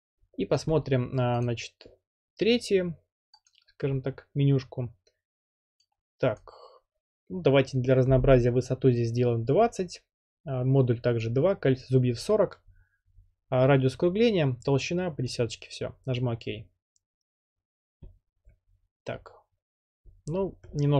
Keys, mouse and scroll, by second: 1.4-2.6 drag, 3.5-4.6 drag, 6.4-7.4 drag, 9.0-9.8 typing, 15.4 click.